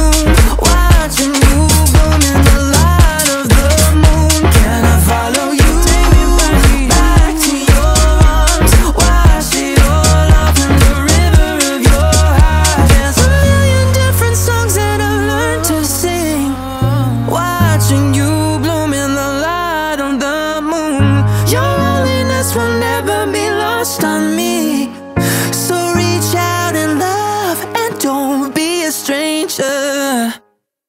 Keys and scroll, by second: 4.8 ctrl+a, 5.7 7, 6.2 0, 10.4 ctrl+a, 11.0 1, 11.2 5, 11.4 0, 12.8 Return.